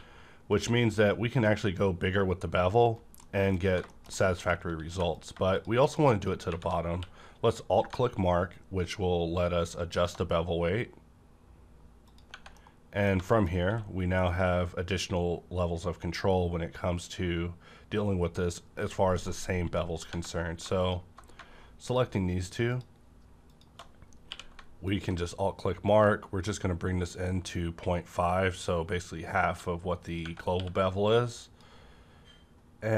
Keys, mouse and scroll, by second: 0.4 click, 2.8 right click, 3.1 middle click, 3.6 Right, 3.8 middle click, 4.1 middle click, 4.8 3, 5.1 click, 5.6 shift+click, 6.5 shift+`, 6.9 q, 7.8 shift+~, 9.9 alt+click, 12.1 alt+click, 12.2 Tab, 12.5 scroll down 1, 12.6 middle click, 13.2 middle click, 13.6 q, 14.2 click, 19.2 right click, 19.3 right click, 19.3 click, 19.7 middle click, 20.1 Tab, 20.7 click, 21.9 alt+shift+click, 22.7 alt+shift+click, 24.2 q, 24.8 alt+shift+click, 24.9 q, 30.1 click, 30.5 q, 31.3 click, 32.7 scroll up 1.